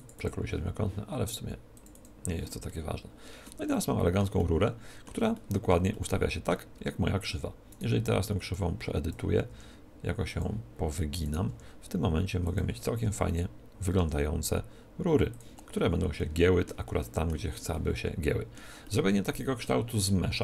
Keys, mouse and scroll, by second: 3.6-7.7 middle drag, 6.7 Tab, 7.7-9.4 right drag, 8.4-12.0 drag, 9.4 r, 11.2-12.8 right drag, 11.4 r, 12.5-14.4 drag, 13.9 s, 15.3-17.1 drag, 16.1 middle click, 17.0-20.4 middle drag.